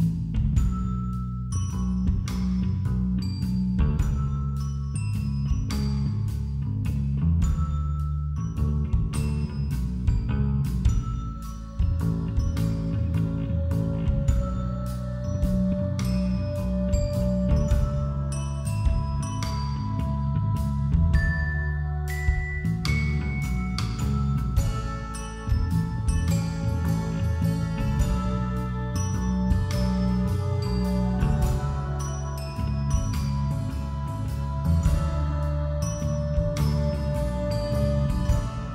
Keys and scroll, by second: 8.0 ctrl+i, 9.1-10.8 typing, 10.0 ctrl+=, 11.9 ctrl+=, 12.0 ctrl+-, 12.2 space, 13.0 [, 13.8 ], 16.7 ], 22.2-23.2 typing, 24.2-26.2 typing, 28.3 space, 30.8 ], 34.5-36.1 typing, 36.2 ctrl+-, 36.5 ctrl+=, 37.3-38.7 typing.